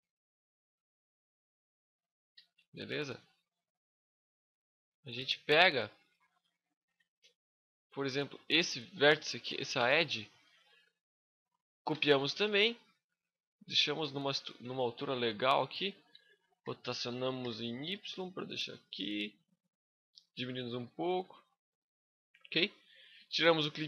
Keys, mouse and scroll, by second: 2.1 n, 2.7 middle click, 3.7 KP_5, 4.4 scroll up 1, 4.5 middle click, 5.0 scroll up 1, 5.1 middle click, 5.5 shift+middle click, 6.1 middle click, 6.6 Tab, 6.8 scroll up 2, 7.3 scroll down 1, 7.9 right click, 9.2 middle click, 9.8 shift+scroll up 1, 10.0 shift+middle click, 11.7 shift+d, 12.0 right click, 12.3 click, 13.9 middle click, 14.5 shift+scroll up 1, 14.5 shift+middle click, 16.4 r, 19.0 click, 19.3 middle click, 20.4 s, 23.1 click.